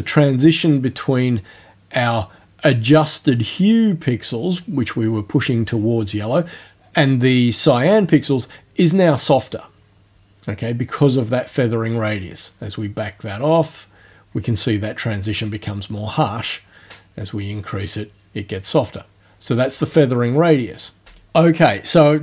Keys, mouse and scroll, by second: 12.2-20.3 drag.